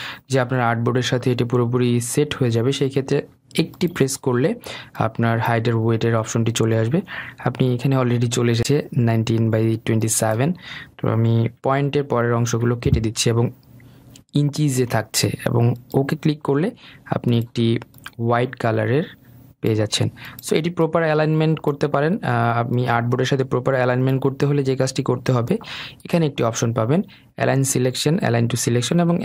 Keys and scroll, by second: 11.7 Delete, 12.2 BackSpace.